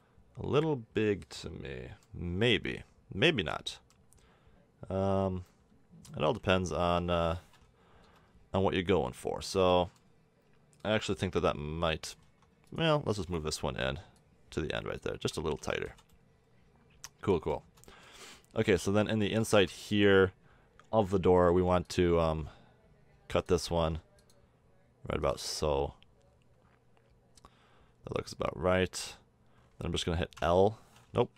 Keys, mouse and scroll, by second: 3.3 middle click, 3.7 middle click, 6.2 KP_7, 6.8 KP_5, 8.0 z, 12.3 Tab, 12.7-13.7 drag, 13.7 l, 15.1 a, 15.6 Tab, 15.9 z, 16.5-17.9 middle drag, 18.5 Tab, 19.5 middle click, 21.5 ctrl+r, 23.8 ctrl+r, 30.4 l, 31.2 a.